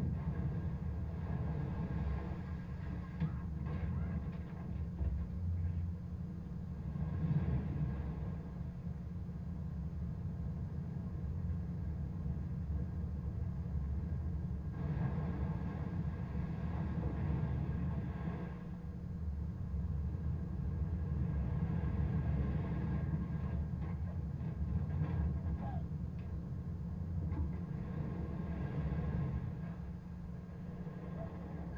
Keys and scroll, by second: 24.9 shift+Down, 27.5 Down.